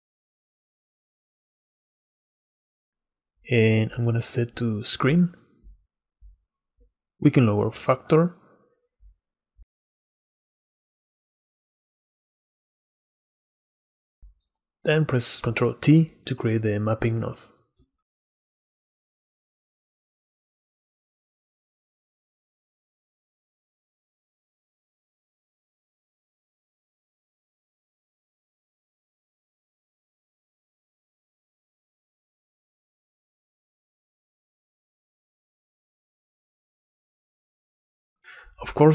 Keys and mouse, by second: 0.2-1.4 drag, 2.4-3.2 middle drag, 4.2-7.1 drag, 7.3-7.7 middle drag, 8.4-9.7 shift+middle drag, 9.7 shift+click, 10.2 shift+middle click, 11.4 shift+click, 11.5-13.2 shift+middle drag, 13.6 click, 14.4 click, 16.3 ctrl+i, 19.1 click, 19.6 click, 21.1-22.9 drag, 23.5-25.0 drag, 25.0-26.4 middle drag, 26.4-28.8 drag, 29.3-30.5 middle drag, 30.5 click, 31.3 shift+middle click, 31.8 shift+middle click, 32.3 click, 33.5 shift+middle click, 34.1 shift+middle click, 35.3 shift+middle click, 35.8 shift+middle click, 36.0 shift+click, 36.4 shift+middle click, 37.0 shift+click, 37.1 shift+middle click, 37.3 shift+click, 37.5 shift+middle click.